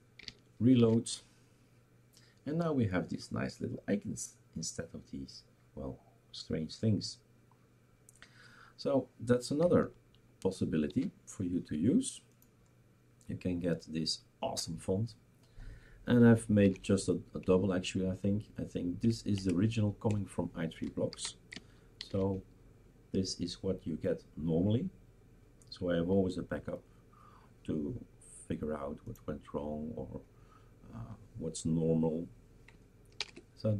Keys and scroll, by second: 0.8 shift+super+r, 11.0 shift+super+q, 16.6 #, 17.4 Up, 19.1 Left, 19.4 Right, 20.1 BackSpace, 21.1 ctrl+s, 22.0 shift+super+r, 33.2 #.